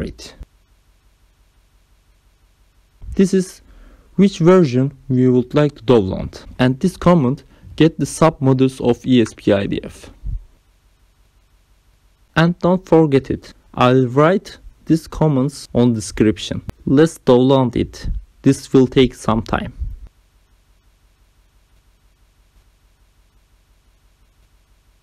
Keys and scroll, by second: 0.0 alt+Tab, 4.5 ctrl+v, 7.9 ., 8.3 g, 8.6 i, 9.4 Return.